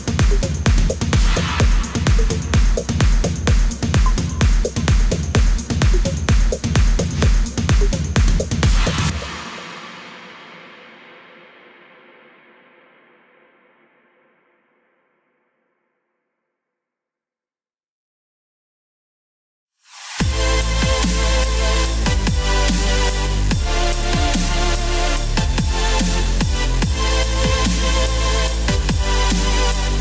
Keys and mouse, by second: 0.1 click, 2.0 KP_4, 2.2 KP_0, 3.2 Return, 5.8-8.8 typing, 7.4 click, 7.8 Return, 8.0 click, 8.3 Return, 8.9 right click, 9.1 click, 9.3-9.8 click, 9.9 click, 10.1 right click, 10.5 click, 10.5-16.1 typing, 10.7 Return, 12.6 right click, 12.9 click, 13.5 click, 13.7 click, 13.8 click, 14.7 KP_Subtract, 15.9 click, 17.7 click, 18.9 KP_6, 19.3 Return, 29.9 click.